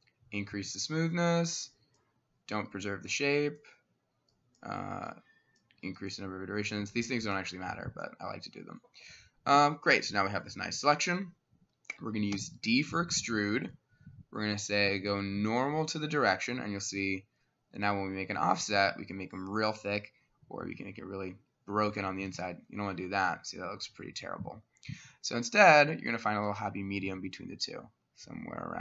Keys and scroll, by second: 12.4 d.